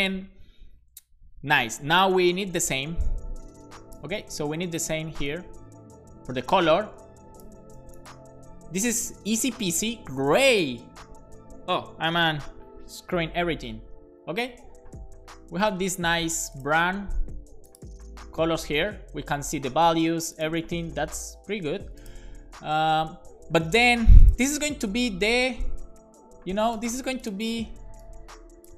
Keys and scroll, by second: 4.1 super+c, 7.6 super+v, 7.8 super+s.